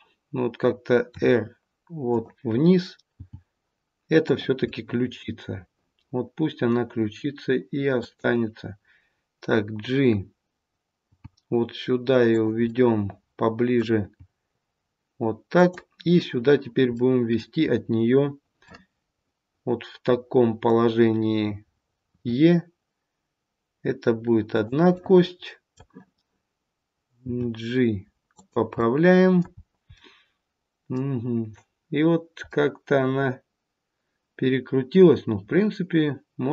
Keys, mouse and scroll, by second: 1.1 r, 3.1 g, 4.6 middle click, 7.9 click, 10.9 g, 12.6 middle click, 14.0 g, 16.9 middle click, 18.6 middle click, 22.0 e, 24.9 middle click, 27.2 g, 28.8 middle click, 29.5 scroll down 1, 29.9 middle click, 32.4 middle click.